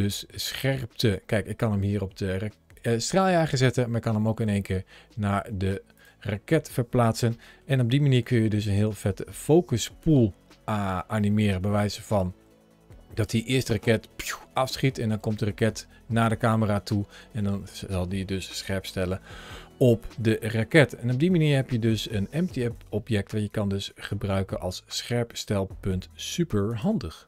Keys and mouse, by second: 0.9 g, 5.8 right click, 7.2 shift+middle click, 8.0 g, 13.0 click, 15.0 g, 22.4 click, 23.0 g, 26.5 click.